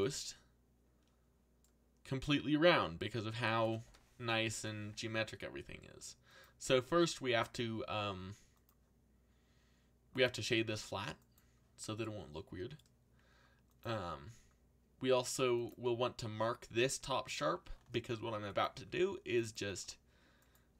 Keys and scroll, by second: 4.5 ctrl+l.